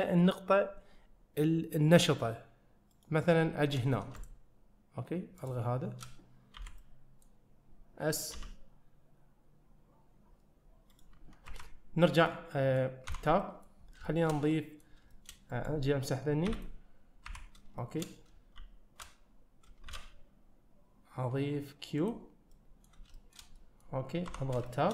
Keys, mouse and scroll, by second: 4.2 shift+click, 5.4 shift+click, 6.6 b, 12.3-12.8 middle drag, 13.2 Tab, 13.5 middle click, 13.9 scroll down 1, 14.3 shift+middle click, 14.6 middle drag, 15.2 shift+middle click, 15.6 drag, 16.5 x, 17.8 shift+middle click, 18.6 shift+s, 19.9 shift+a, 22.6 middle click, 23.3 shift+middle click, 23.6 middle click, 24.3 Tab, 24.7 shift+scroll up 1.